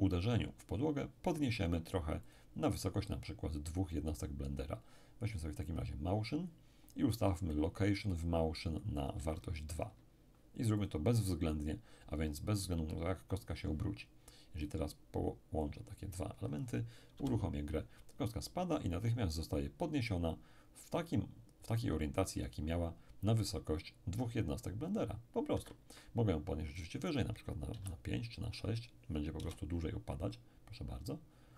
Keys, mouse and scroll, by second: 2.3 click, 5.7 click, 9.0-11.8 drag, 9.2 2, 14.6-16.6 drag, 17.1 p, 25.5 Escape, 26.8 click, 27.7 6, 28.5 click, 29.4 p.